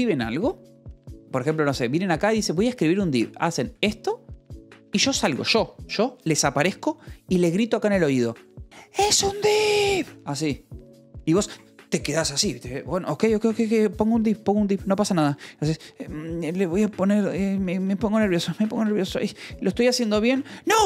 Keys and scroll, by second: 0.3 Return, 4.2 Left, 11.2 i, 14.0 v, 17.3 \, 18.4 BackSpace, 18.5 /.